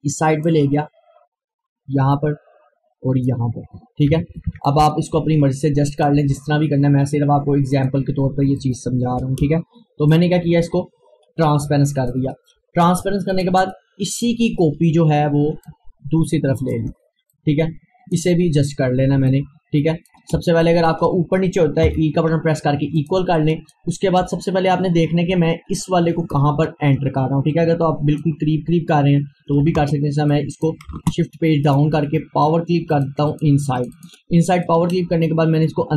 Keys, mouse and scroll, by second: 3.8 Right, 4.7-11.6 drag, 12.1-16.6 shift+drag, 16.6 ctrl+right click, 17.4-19.4 drag, 19.4 click, 21.9 e, 23.0-30.3 drag, 30.3 click, 30.9 shift+Page_Down, 31.7 right click, 33.0-35.9 drag.